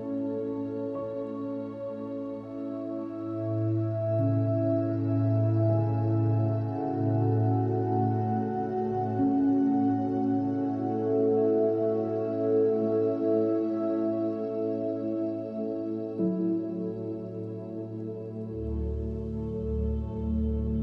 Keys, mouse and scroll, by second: 0.0 shift+middle click, 2.5 shift+middle click, 2.8 shift+middle click, 3.2 shift+click, 3.7 click, 3.9 click, 4.2 click, 4.3 click, 4.6 click, 4.7 click, 5.0 click, 5.1 click, 5.3 ctrl+click, 5.9 click, 6.1 shift+middle click, 6.3 shift+middle click, 9.7 middle click, 11.0 shift+middle click, 11.6 shift+middle click, 12.1-13.6 middle drag, 13.9 shift+middle click, 14.5 shift+middle click, 15.3 shift+middle click, 15.9 shift+middle click, 16.4 middle click, 16.5 middle click, 16.7 shift+middle click, 17.4 shift+middle click, 17.9 middle click, 18.2 middle click, 18.4 ctrl+middle click, 18.9 shift+middle click, 19.3 middle click, 19.4 middle click, 19.6 ctrl+middle click.